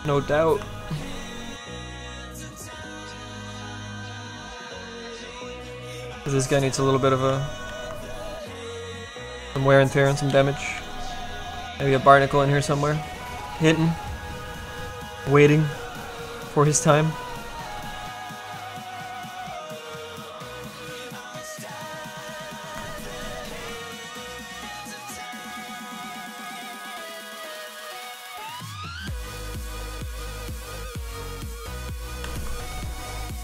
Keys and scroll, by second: 6.2 s, 7.3 s, 7.7 s, 10.3 s, 10.9 s, 14.5 s, 18.2 s, 32.2 s.